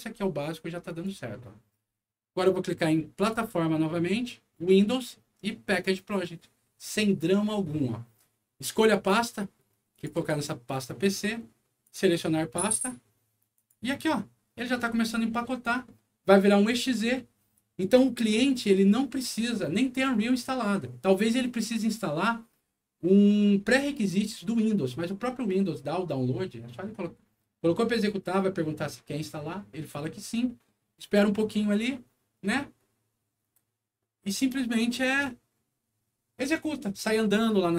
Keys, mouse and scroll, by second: 0.8 click, 3.1 click, 5.6 click, 8.6 click, 9.9 click, 10.1 click, 11.8 click, 13.5 click, 35.0 click.